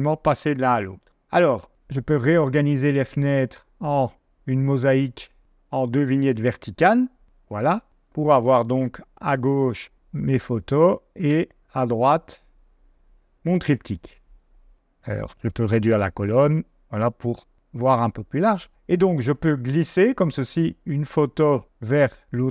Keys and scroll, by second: 9.3 space, 11.2 space, 16.5 space.